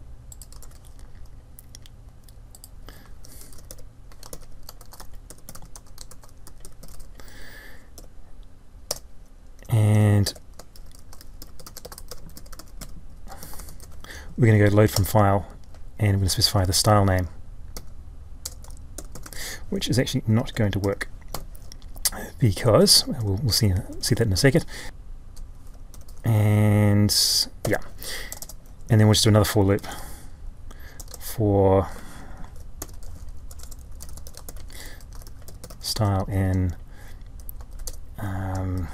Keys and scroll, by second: 0.6 ctrl+v, 4.3 ctrl+j, 32.6 ctrl+y, 34.4 ctrl+j.